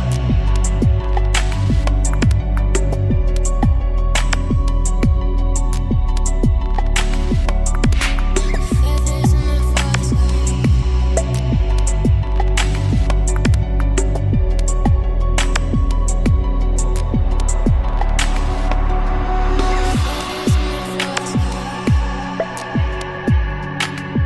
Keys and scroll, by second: 17.9-18.7 typing.